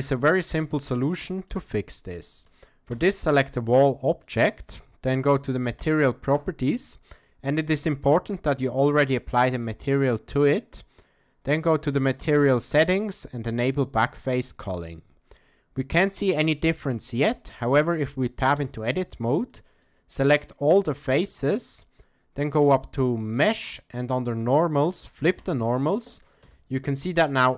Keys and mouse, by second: 0.0-0.6 middle drag, 0.9-1.5 shift+middle drag, 2.2 shift+middle drag, 4.3 middle click, 12.2 click, 14.1 click, 16.2-16.6 shift+middle drag, 17.0 middle click, 18.6 Tab, 19.5 middle click, 23.5-25.6 drag, 26.5 Tab, 27.1-27.5 middle drag.